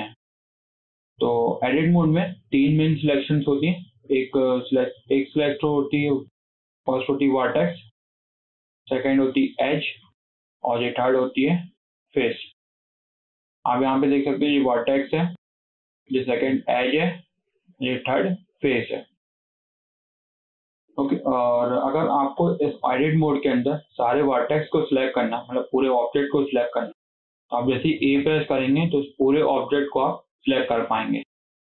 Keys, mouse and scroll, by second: 3.9 middle click, 4.2 scroll up 1, 4.5 shift+middle click, 5.4 scroll up 2, 5.5-6.6 shift+middle drag, 6.6 click, 8.2 click, 9.2 click, 10.6 click, 11.5 click, 12.0 scroll up 1, 12.2 shift+middle click, 12.6 scroll up 1, 12.8-14.4 shift+middle drag, 14.4 click, 16.0 click, 17.9 click, 19.0 scroll down 4, 19.2 shift+middle click, 19.7-20.9 shift+middle drag, 20.9 click, 21.2 scroll down 2, 21.5 shift+middle click, 22.2 KP_7, 23.0-24.3 shift+middle drag, 24.3 scroll down 2, 24.5-26.0 shift+middle drag, 26.0 click, 28.0 a.